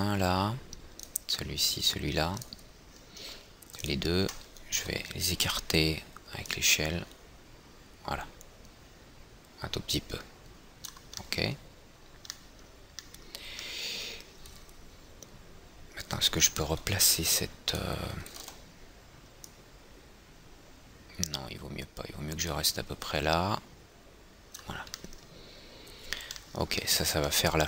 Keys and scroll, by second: 5.2 e, 6.0 r, 17.2 é, 17.9 é, 19.0 w.